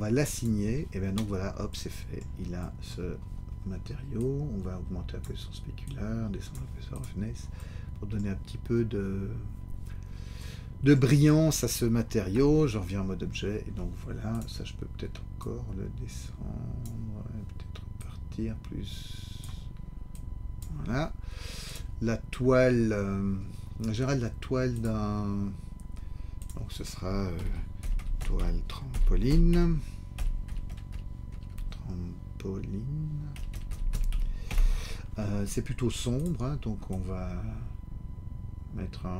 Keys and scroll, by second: 12.3 Tab, 27.3 shift+t, 27.8 o, 28.9 shift+t, 29.3 r, 31.3 BackSpace, 34.1 e, 34.4 Return.